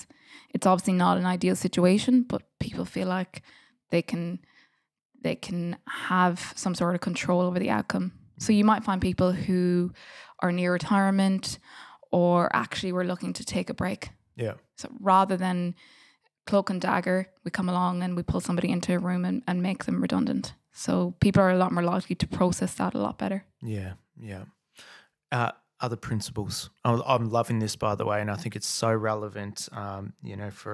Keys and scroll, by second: 20.4 super+s, 26.3 F8.